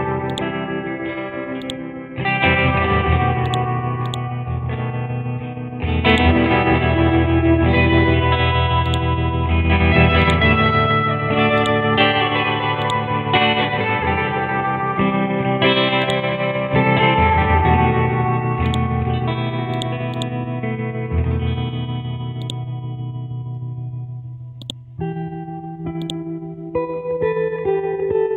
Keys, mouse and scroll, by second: 0.3-3.0 drag, 3.1 ctrl+z, 3.5 click, 6.1-8.0 drag, 10.2 alt+click, 11.6 click, 17.4 Up, 17.9 Up, 18.0 Up, 18.2 Up, 26.0-28.3 alt+drag.